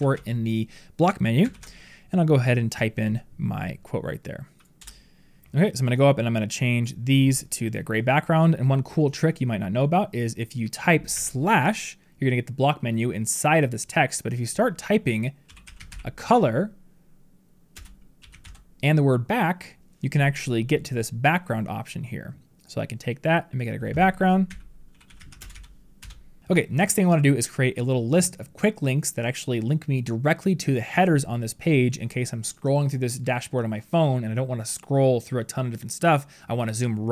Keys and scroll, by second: 1.4 ctrl+v.